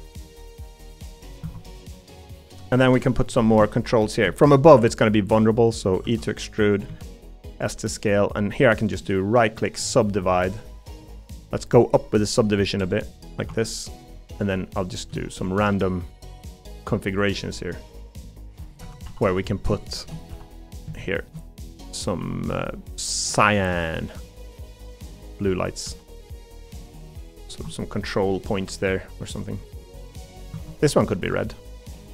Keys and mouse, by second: 1.0 middle click, 2.0 middle click, 6.0 e, 6.9 s, 8.2 middle click, 9.0 right click, 9.2 s, 13.5 3, 19.0 g, 19.9 shift+middle click, 20.3 g, 21.2 shift+middle click, 25.8 g, 27.6 Tab, 28.3 middle click, 29.3 middle click, 31.9 g.